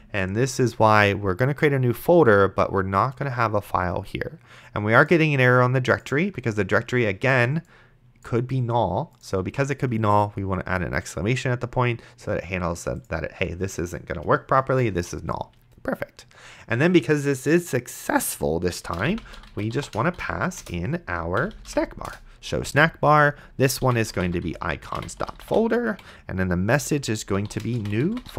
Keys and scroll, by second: 0.0-0.1 typing, 9.8 shift+1, 14.9 Return, 18.8-22.2 typing, 20.6 Return, 22.7 Tab, 23.8-28.3 typing.